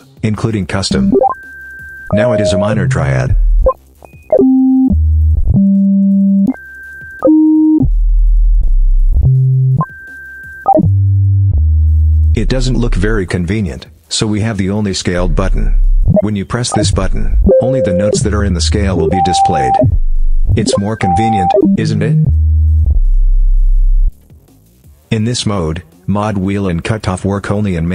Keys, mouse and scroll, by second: 0.7-13.1 drag, 14.0 click, 14.9-24.0 drag, 27.1-27.9 drag.